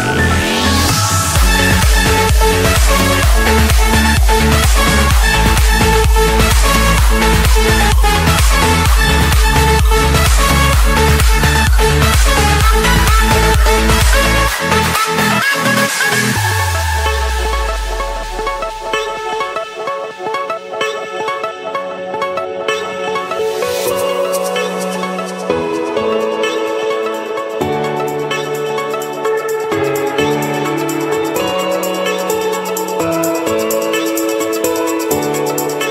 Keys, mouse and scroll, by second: 0.2 scroll, 0.4-1.3 middle drag, 1.3 l, 1.5 Return, 3.2-4.3 drag, 4.6-5.7 drag, 5.8 Escape, 6.5 Return, 8.1 click, 9.9 click, 10.7 Escape, 11.8 click, 12.4 click, 13.7 Delete, 15.1 a, 16.1 Return, 17.6 click, 18.5-18.8 scroll up 5, 20.2 click, 20.6-21.2 scroll down 3, 23.5 click, 24.8 Escape, 25.4 typing, 26.4 Return, 26.9 Return, 28.7 click, 29.4 scroll down 1, 30.2 Escape, 30.9-31.2 scroll up 1, 32.5 a, 33.2 Return, 34.9-35.9 scroll.